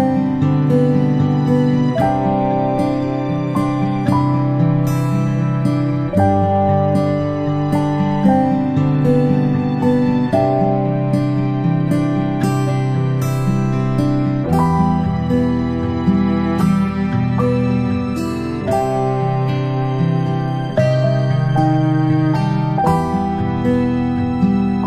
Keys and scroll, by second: 20.6 ctrl+z, 21.6 ctrl+z.